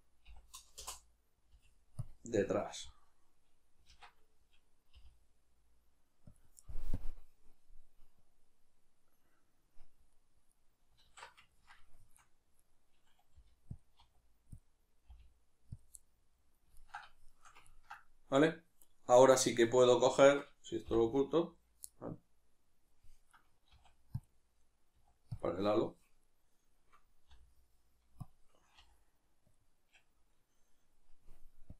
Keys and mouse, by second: 2.1 click, 2.4-12.6 middle drag, 3.9 alt+q, 11.0 alt+q, 12.6 right click, 13.4 g, 13.8 click, 14.0 r, 14.6 click, 15.1 g, 16.0-18.4 middle drag, 18.4 right click, 20.9 h, 21.9-23.3 middle drag, 23.3 right click, 23.7 s, 24.2 click, 25.0 s, 25.4 click, 26.2-28.3 right drag, 28.3 click, 28.8 g, 29.6 click.